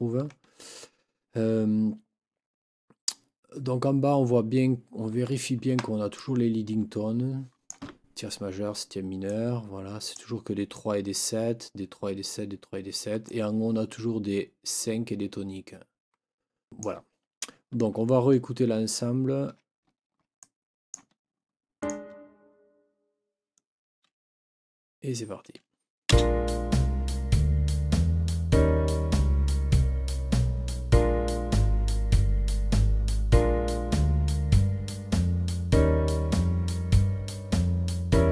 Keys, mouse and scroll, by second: 5.4 ctrl+scroll up 2, 6.2-7.8 ctrl+drag, 9.2-10.3 drag, 10.7 click, 13.2-14.8 drag, 14.9 click, 19.2 ctrl+scroll up 1, 20.4-21.1 ctrl+drag, 21.8 click, 26.1 space.